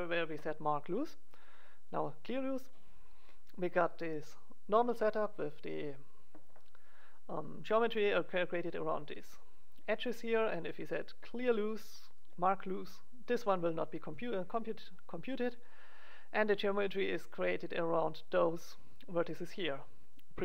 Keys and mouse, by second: 3.2-10.5 middle drag, 11.3-13.8 drag, 13.8 middle click, 19.5 middle click, 20.3-20.4 middle drag.